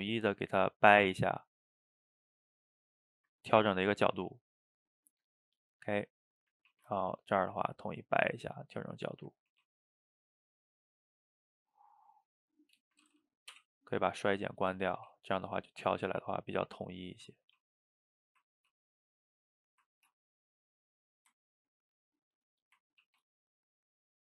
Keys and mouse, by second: 3.4-5.6 middle drag, 5.6 click, 5.8 middle click, 6.7 ctrl+t, 8.4-9.0 middle drag, 9.0 drag, 9.5 ctrl+t, 12.0-13.5 middle drag, 13.5 o, 13.8-14.4 middle drag, 14.4 click, 14.6-14.9 middle drag, 14.9 ctrl+t, 16.4 middle click, 17.0 click, 17.4 ctrl+t, 18.3 click, 18.6 ctrl+t, 19.7 click, 20.0 ctrl+t, 21.4-22.6 ctrl+middle drag, 22.6 click, 23.0 ctrl+t.